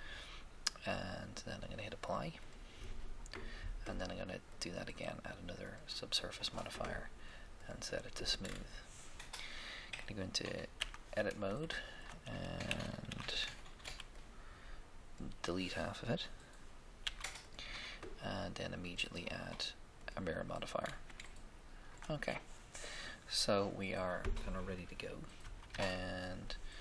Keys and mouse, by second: 2.0-4.1 drag, 4.5-6.2 drag, 7.6-8.8 drag, 10.8 Tab, 12.7 z, 13.0 a, 13.9 b, 17.0 x, 17.2 x, 18.8-20.3 drag, 20.8-21.9 middle drag, 25.4 1, 25.4 KP_1, 25.7 KP_3, 25.7 3.